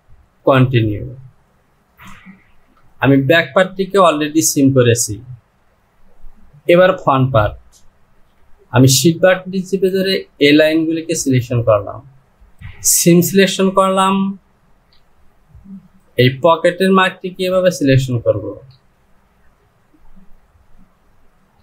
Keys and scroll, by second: 2.7 Return.